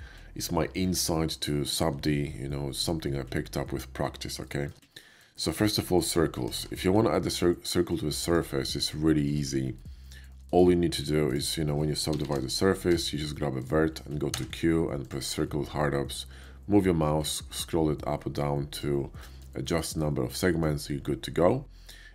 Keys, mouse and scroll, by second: 4.4 shift+middle drag, 4.9 scroll up 1, 5.3 shift+middle drag, 6.5 shift+a, 8.1 click, 8.6 middle drag, 9.3 Tab, 9.6 middle click, 10.1 shift+middle click, 10.5 shift+right click, 11.2 shift+click, 12.1 shift+r, 12.3 shift+r, 12.7 Tab, 13.1 middle click, 13.6 click, 14.2 q, 15.0 click, 17.2 middle click, 17.2 scroll up 1, 18.6 click, 19.1 middle click, 19.6 shift+middle click, 20.0 shift+middle click.